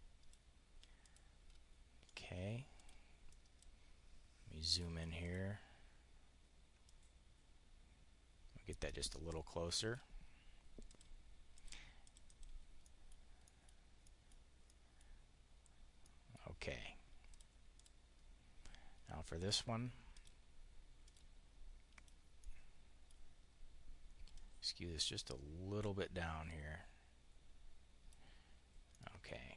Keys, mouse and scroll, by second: 0.9 click, 1.9 click, 2.6 click, 3.2 click, 4.6 click, 5.0 click, 6.8-9.9 ctrl+drag, 10.8 click, 11.4 click, 11.9 click, 12.2 click, 12.7 click, 13.2 click, 13.6 click, 14.0 click, 15.5 click, 17.1 click, 17.6 click, 19.4 click, 20.0 click, 20.9 click, 21.8 click, 22.2 click, 24.2 click, 28.7 click, 29.2-29.5 drag.